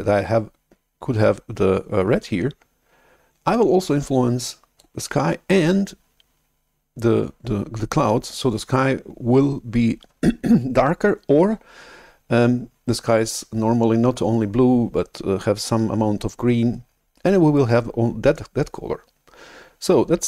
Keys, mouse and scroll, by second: 3.5-4.7 drag.